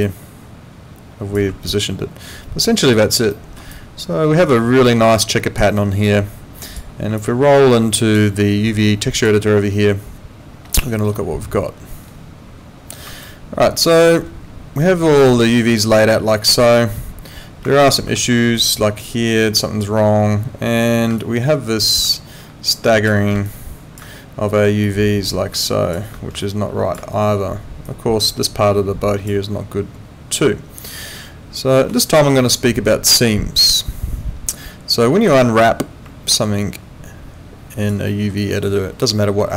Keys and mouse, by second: 0.0 click, 1.7 alt+click, 3.3 alt+middle click, 3.7 alt+click, 5.6 alt+right click, 6.0 alt+click, 7.2 alt+click, 9.2 click, 13.2 alt+middle click, 15.2 alt+middle click, 17.9 ctrl+2, 31.8 Escape, 36.3 alt+click, 38.1 alt+middle click, 38.4 alt+right click, 38.6 alt+click.